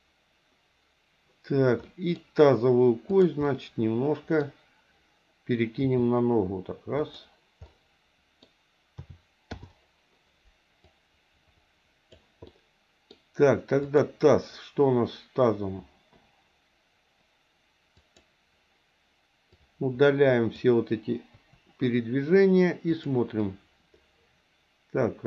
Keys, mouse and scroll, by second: 1.8 middle click, 3.1 click, 3.4 middle click, 5.7 g, 7.7 middle click, 9.2 a, 9.5 i, 10.9-12.2 drag, 12.4 middle click, 13.8 click, 17.9 click, 19.5 click, 19.7 click, 21.4 Delete, 23.0 click, 23.5-25.2 drag.